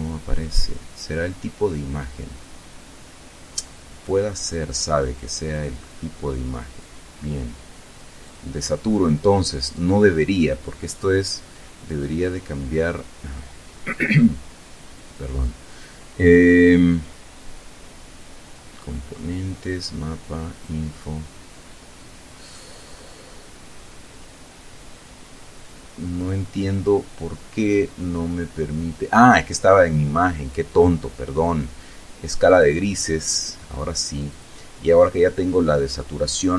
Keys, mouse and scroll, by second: 5.0 click, 7.8 click, 9.1 click, 32.0 click, 33.8 click.